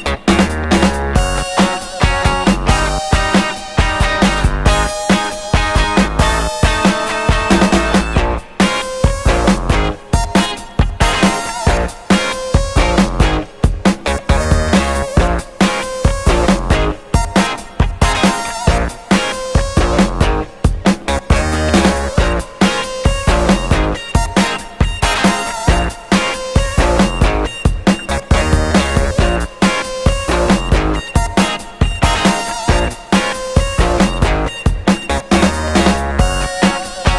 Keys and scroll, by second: 0.7 ctrl+z, 2.2 ctrl+y, 2.7 ctrl+y, 4.1 Delete, 4.4 Delete, 5.2 Delete, 6.1 Delete, 6.5 Delete, 7.3 Delete, 8.9 Escape, 11.0 Delete, 12.3 Delete, 17.5-19.0 typing, 20.6 ., 21.4 9, 21.6 BackSpace, 21.7 -.